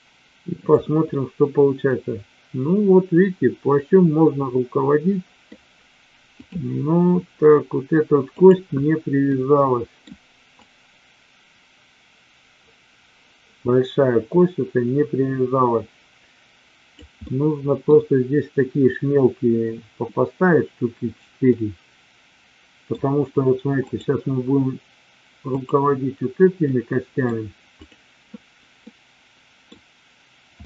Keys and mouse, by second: 0.5 click, 1.0-5.4 middle drag, 6.3 click, 8.3 click, 9.4-9.9 middle drag, 10.7-17.0 drag, 17.2-17.8 middle drag, 21.5-22.9 middle drag, 23.8-24.8 drag, 25.4-26.4 drag, 26.5-27.2 middle drag, 27.9 click, 28.9-29.7 middle drag.